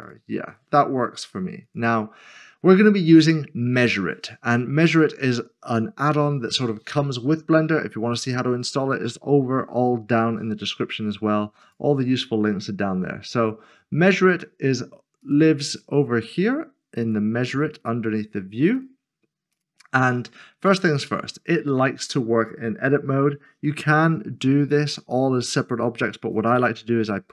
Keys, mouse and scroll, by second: 0.0 g, 0.0 click, 11.6 click, 15.2 click.